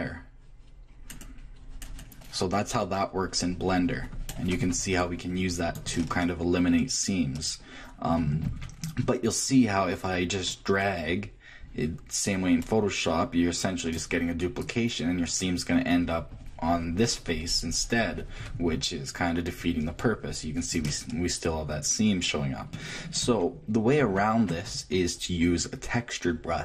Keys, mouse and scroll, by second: 6.0-7.2 middle drag, 7.2 click, 7.6 click, 8.1 Left, 9.5-11.4 drag, 14.6-16.6 drag, 20.9-22.9 middle drag, 22.9 click.